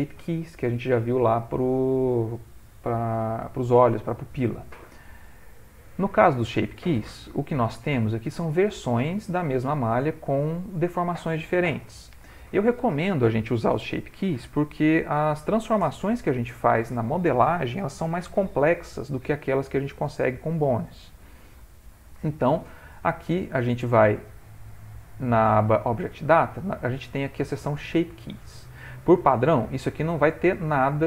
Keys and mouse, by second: 5.7 click, 7.8 ctrl+middle click, 8.2 ctrl+middle click, 8.5 shift+middle click, 8.7 shift+middle click, 8.8 ctrl+middle click, 9.2 ctrl+middle click, 9.8 shift+middle click, 26.5 middle click, 30.1 click.